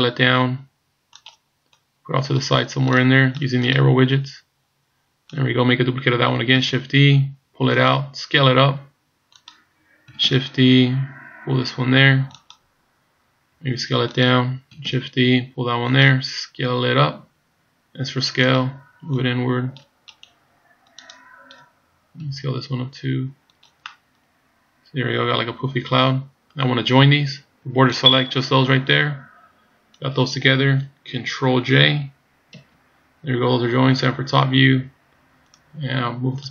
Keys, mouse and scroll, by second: 1.7 click, 2.9 click, 3.1 click, 3.4 click, 3.6 click, 6.6 shift+d, 8.4 s, 10.3 shift+d, 13.6 s, 14.9 shift+d, 18.1 s, 19.2 click, 20.2 right click, 20.9 click, 22.3 s, 23.9 middle click, 27.6 b, 32.6 ctrl+j, 33.9 KP_7, 35.5 click.